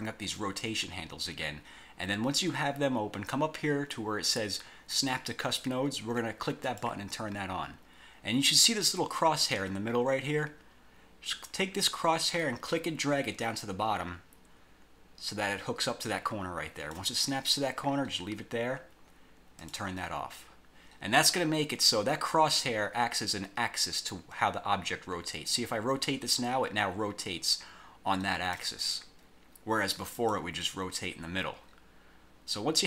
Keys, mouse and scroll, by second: 6.8 click, 12.5-17.2 drag, 19.7 click, 25.6-28.8 drag, 30.3 click.